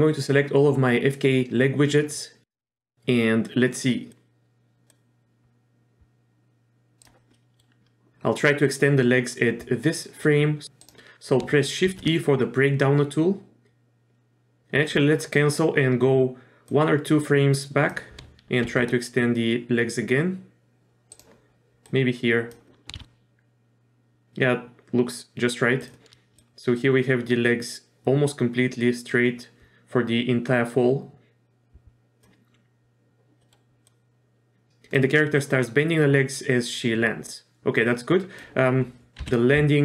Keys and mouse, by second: 2.7 middle click, 4.1 click, 4.9-7.0 drag, 7.3 middle click, 10.6 shift+e, 11.9 shift+e, 16.7 click, 18.7 shift+e, 21.9 click, 22.9 shift+e, 26.4-32.2 drag, 33.4 middle click, 33.8-35.0 drag, 35.4-38.4 drag, 39.2 KP_3.